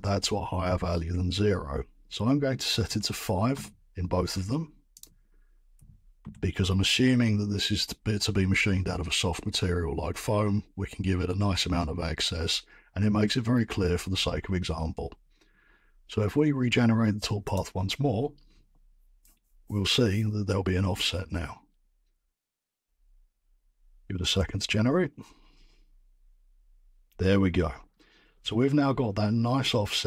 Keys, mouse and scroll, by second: 2.8-4.4 typing, 3.5 Return, 5.0 click, 5.7 typing, 6.2 Return, 7.3 typing, 17.5 click, 28.0-29.9 scroll.